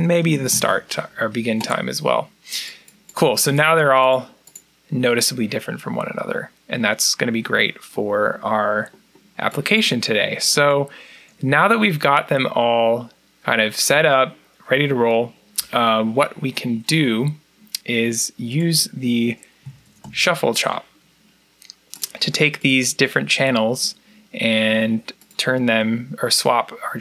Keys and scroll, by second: 0.0-0.8 typing, 19.2-20.4 typing, 22.8-23.5 typing.